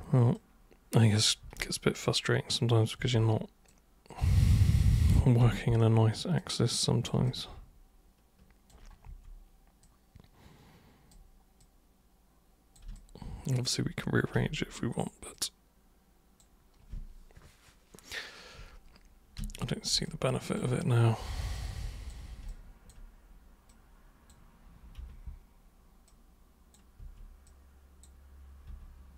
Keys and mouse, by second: 0.3-1.3 super+drag, 1.4 super+e, 2.2-2.8 super+drag, 3.0 super+w, 3.6-4.9 super+drag, 5.4 super+r, 6.3-7.0 super+drag, 7.2-8.7 alt+super+drag, 9.0 super+w, 9.8-11.1 super+drag, 11.6 super+click, 12.9 alt+super+click, 14.3 super+r, 15.3-16.3 super+drag, 19.4 super+w, 20.0 alt+super+click, 21.5 super+click, 22.4 alt+super+click, 23.6 super+click, 24.9 super+r, 26.0 super+click, 27.0 super+w, 27.4 super+click, 28.7 super+r.